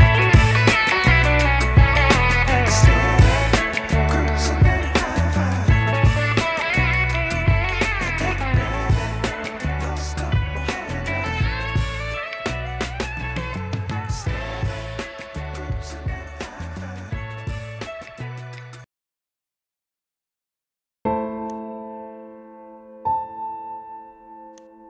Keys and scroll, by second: 4.3 5, 4.7 0, 4.9 0, 11.1 u, 17.8 0.